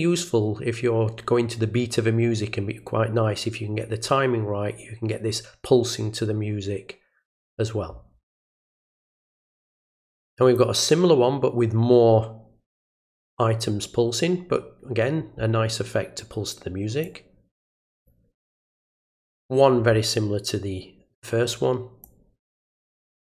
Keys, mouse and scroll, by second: 9.3-10.5 drag, 17.0-18.0 drag, 22.0 click.